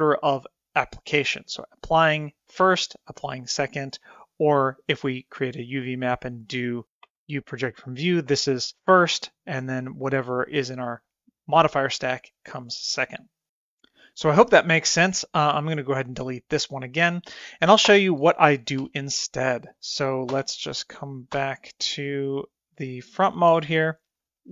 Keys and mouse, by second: 0.2-2.4 drag, 4.7 drag, 6.9 Tab, 7.1 u, 16.5 click, 18.8 Tab, 20.3 KP_3, 21.3 KP_1, 22.2-22.6 middle drag.